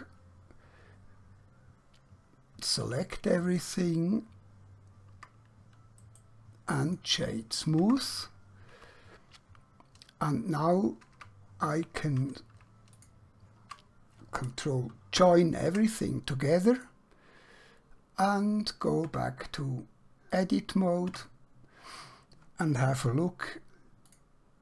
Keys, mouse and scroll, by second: 2.8 Tab, 3.5 right click, 5.2 Tab, 6.0 right click, 6.7 click, 7.8 Tab, 11.2 Tab, 13.0 shift+click, 16.9 click, 17.7 scroll down 1, 19.0 Tab, 20.3 click, 21.1 Tab.